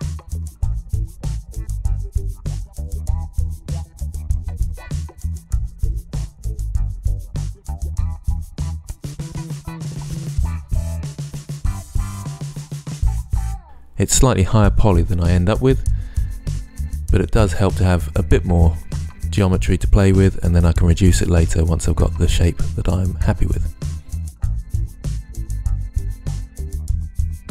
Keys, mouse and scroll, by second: 2.3 l, 2.7 KP_1, 3.3 ctrl+s, 3.5 ctrl+F11, 6.3 ctrl+Tab, 7.3 click, 9.5 z, 10.1 Tab, 10.4 Tab, 10.6 l, 11.2 ctrl+Tab, 14.5-16.1 typing, 14.9 ctrl+z, 16.7 right click, 17.7 a, 17.9 c, 19.2 click, 19.7 click, 19.9 click, 20.2 g, 23.2 ctrl+s, 25.1 click, 25.5 click, 26.6 r, 27.3-27.5 ctrl+z.